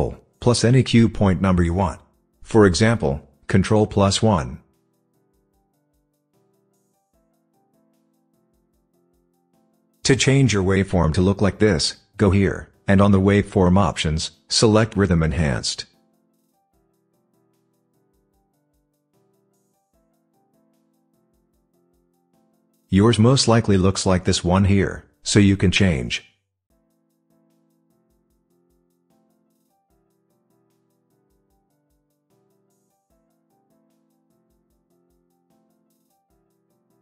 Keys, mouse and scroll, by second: 3.5 ctrl+1, 14.6 click, 26.6 click.